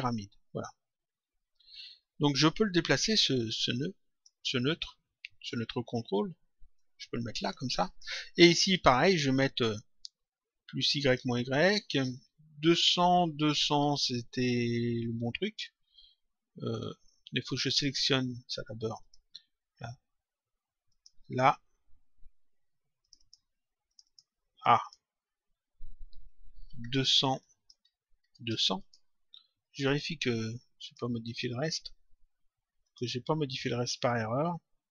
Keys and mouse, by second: 3.3 click, 6.7 click, 9.4 click, 10.9 click, 17.6 click, 18.9 click, 21.0 click, 23.0 click, 27.3 click, 28.7 click, 29.8 click, 32.7 click, 34.8 click.